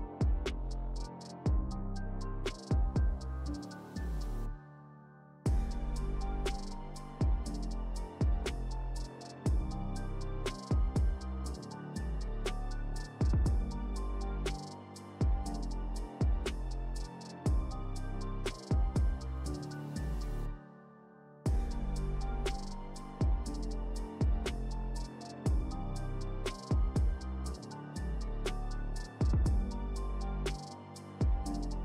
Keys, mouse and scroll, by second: 0.0-0.6 typing, 0.8 ctrl+Return, 2.6-3.1 shift+drag, 5.2 Right, 6.1 Return, 7.3 click, 11.6 scroll down 1, 17.0-21.6 drag, 22.9 click, 23.9-24.6 shift+drag, 27.5 ctrl+alt+shift+Right, 28.8 ctrl+shift+Left, 30.1 alt+shift+Left, 31.4 alt+shift+Right.